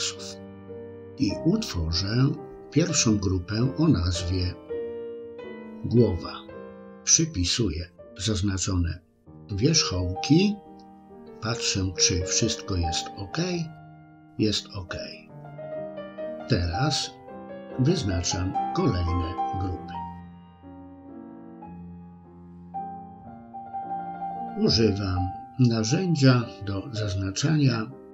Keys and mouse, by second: 5.7 click, 8.9 click, 10.2 click, 16.5 c, 26.9 c.